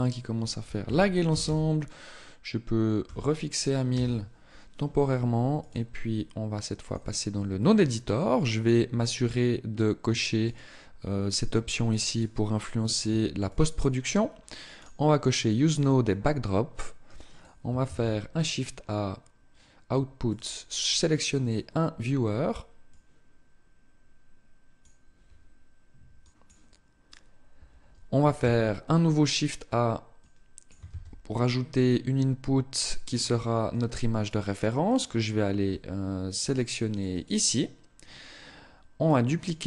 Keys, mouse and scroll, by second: 5.0 click.